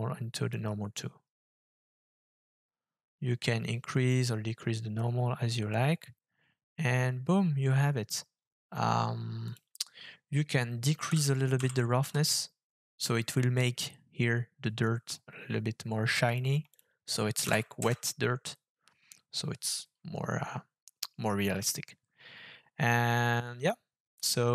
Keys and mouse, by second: 9.5 click, 16.3 click.